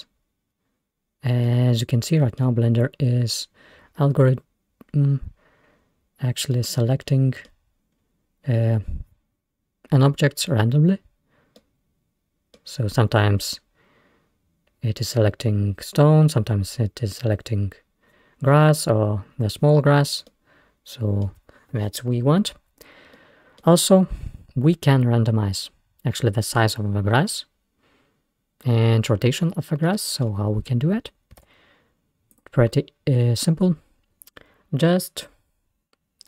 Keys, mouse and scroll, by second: 1.0-1.5 scroll down 1, 1.5-5.7 middle drag, 5.8-6.4 scroll down 1, 6.4-7.0 scroll down 1, 7.0-7.9 middle drag, 7.9-8.4 scroll up 2, 8.6-9.0 scroll down 1, 11.6-13.0 middle drag, 13.0-13.7 scroll up 2, 18.4-19.7 scroll down 1, 19.7-20.3 scroll down 1, 20.3-24.6 middle drag, 24.6-27.0 scroll up 1, 27.0 scroll up 1, 29.9-31.5 middle drag, 31.5 shift+a.